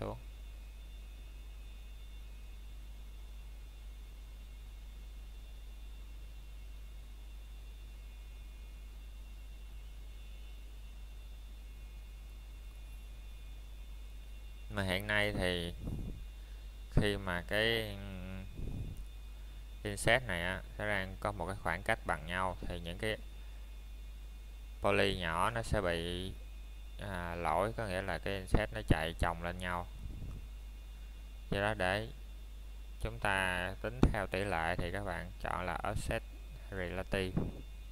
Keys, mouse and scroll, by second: 5.7 i, 13.8 click, 16.2 click, 23.9 click, 37.7 middle click.